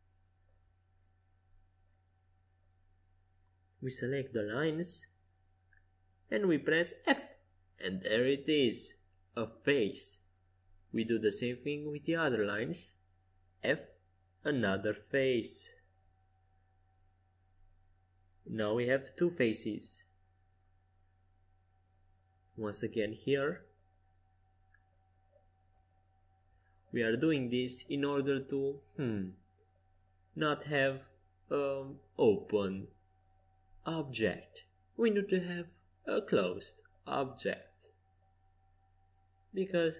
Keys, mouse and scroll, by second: 0.3-2.2 right drag, 2.2-7.8 middle drag, 7.0 f, 9.3-14.2 middle drag, 14.2 click, 14.2 f, 15.0-16.7 middle drag, 17.9-21.6 middle drag, 18.4-20.2 right drag, 21.0-24.4 right drag, 23.1 middle click, 24.4-25.6 middle drag, 25.6-29.0 right drag, 27.9 f, 29.0 click, 29.2-30.4 middle drag, 30.4-35.6 right drag, 34.4-35.9 middle drag, 35.9 a, 36.6 middle click, 38.1-39.7 right drag, 39.7 middle click.